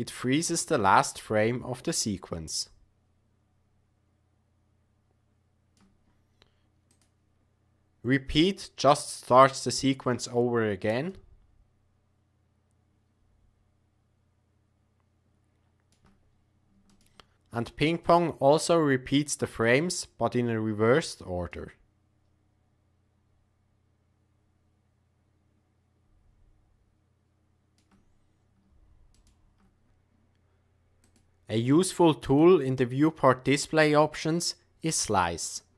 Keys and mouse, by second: 1.1-6.0 shift+drag, 6.8-9.3 drag, 11.2-15.9 shift+drag, 17.0 shift+click, 18.1-19.8 drag, 21.6-27.7 shift+drag, 29.3 shift+click, 31.0 click, 32.2 click, 35.4 click.